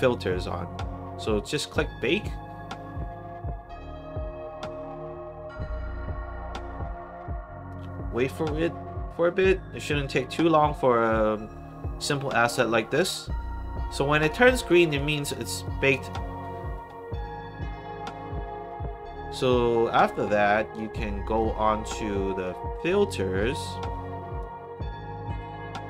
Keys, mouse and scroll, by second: 1.5 click, 13.8 click, 14.5 click, 14.9 click, 15.6 click, 20.5 click, 21.3 click, 23.3 click, 24.3 click.